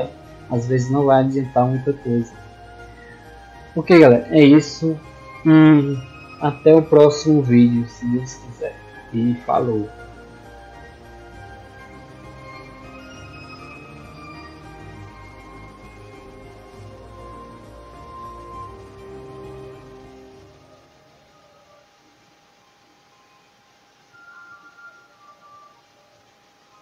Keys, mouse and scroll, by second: 0.2 click, 0.6 drag, 0.8 click, 1.1 click, 1.5 drag, 1.8 click, 2.1 click, 2.3 click, 13.4 click, 19.6-24.7 drag, 26.7 click.